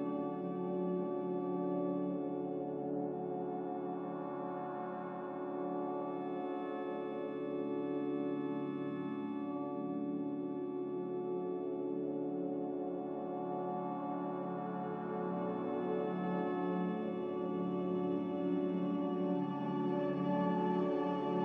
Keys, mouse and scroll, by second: 1.4 b, 3.2 m, 12.6 b.